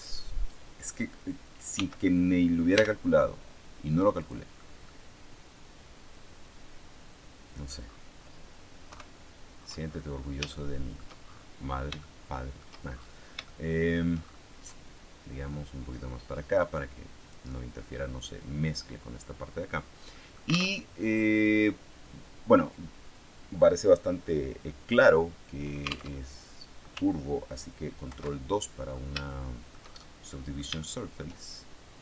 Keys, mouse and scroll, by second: 1.6 s, 2.6 x, 4.1 click, 4.4 middle click, 4.9 scroll up 1, 6.0-7.6 drag, 7.8-8.3 scroll down 1, 8.3 scroll down 1, 8.8 KP_3, 9.7-10.4 scroll down 1, 10.4 shift+middle click, 11.0-11.9 shift+scroll up 1, 11.9 shift+middle click, 12.9-13.4 shift+scroll up 1, 13.4 shift+middle click, 14.0-14.8 shift+scroll up 1, 15.4-17.4 drag, 19.6 scroll down 1, 20.0 click, 20.0 middle click, 20.7 alt+Tab, 26.0 alt+Tab, 28.0 ctrl+2, 29.2-31.4 shift+middle drag.